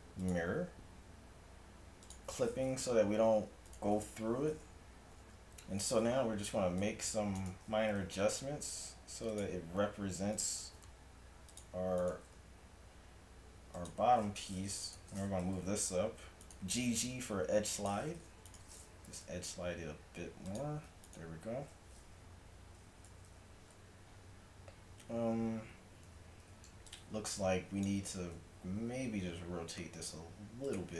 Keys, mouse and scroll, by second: 2.1-3.7 drag, 4.1-5.4 right drag, 5.2 a, 6.6 c, 7.9 g, 10.6 g, 12.2 g, 15.5 g, 16.8-18.5 middle drag, 16.8 g, 19.1 g, 23.2 a, 23.3 z, 25.8 z, 26.1 z, 26.5 z, 28.8 r.